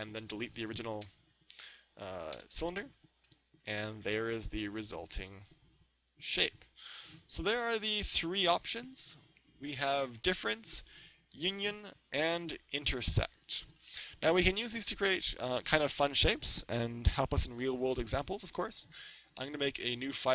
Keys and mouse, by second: 0.2-2.4 right drag, 1.0 Delete, 3.3-6.2 middle drag, 3.8 right click, 12.4-14.4 middle drag, 14.4-17.3 middle drag, 17.7 KP_1, 19.1-20.3 drag.